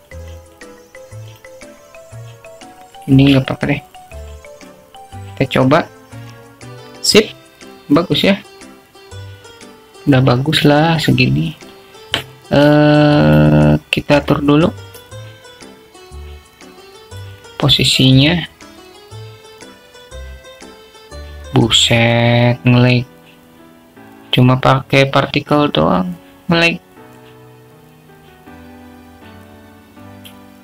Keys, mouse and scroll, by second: 1.7-2.8 drag, 5.1-5.4 drag, 6.7-7.9 drag, 15.4 click, 17.0 click, 19.4-28.2 drag, 29.3-30.6 drag.